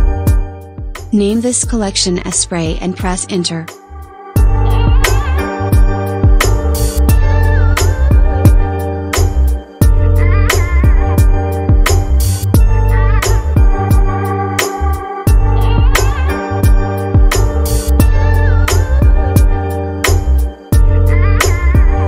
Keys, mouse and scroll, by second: 3.1-5.9 drag, 6.4 click, 7.6-8.2 scroll down 4, 8.7-9.4 shift+middle drag, 9.4-10.3 scroll up 1, 10.3-11.0 scroll up 3, 11.0-12.5 shift+middle drag, 12.5 shift+a, 16.9 KP_1, 18.0-19.0 scroll up 2, 19.8 s, 21.7-22.0 middle drag.